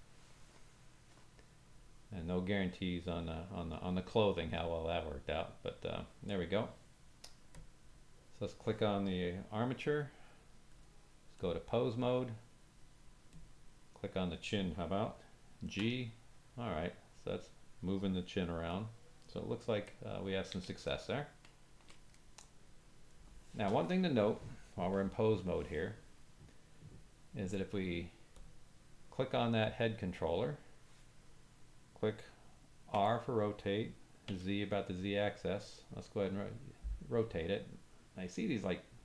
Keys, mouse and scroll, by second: 10.7-13.4 drag, 15.7 g, 19.9-20.5 ctrl+middle drag, 22.2 middle click, 28.3 click, 33.1 r.